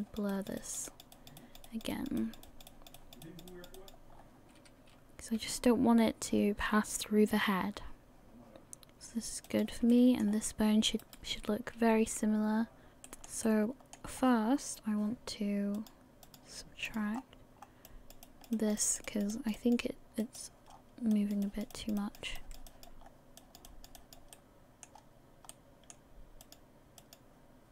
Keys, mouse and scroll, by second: 0.0 click, 0.3 click, 0.5 click, 0.9 click, 1.1 click, 1.8 click, 2.2 click, 2.4 click, 2.9 click, 3.0 click, 3.2 click, 4.1 scroll down 1, 5.4-6.4 scroll down 4, 5.4 r, 9.9 shift+middle click, 10.3 scroll up 2, 11.3 right click, 11.7 r, 12.9 middle click, 12.9 scroll up 4, 13.0 shift+middle click, 13.4 middle click, 14.1 scroll up 1, 15.7 click, 17.2-17.6 scroll up 1, 17.9 click, 17.9-18.2 scroll up 1, 18.2 click, 19.1 click, 19.6 click, 20.7-21.1 scroll down 4, 21.1 click, 21.4 click, 22.0 click, 22.4 click, 23.0 scroll down 1, 23.4 click, 23.7 click, 24.3 middle click, 24.3 scroll down 1, 24.9 scroll up 1, 25.5 middle click, 25.5 scroll up 3, 26.4 click, 27.0 click.